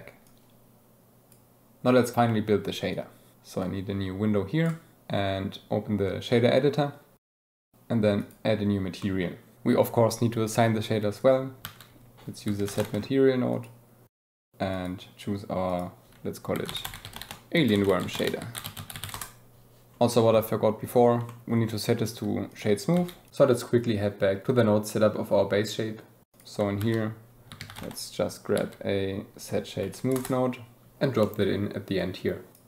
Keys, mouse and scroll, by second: 0.3-1.3 drag, 3.6-6.6 drag, 7.2 click, 8.2 click, 9.0 click, 11.2 click, 11.7 shift+a, 13.8 click, 14.5 click, 15.7-19.2 drag, 19.9 shift+click, 21.3 shift+middle click, 23.1 click, 24.3 KP_Decimal, 25.3 click, 26.0 g, 26.3 click, 26.8 shift+a, 32.0 click.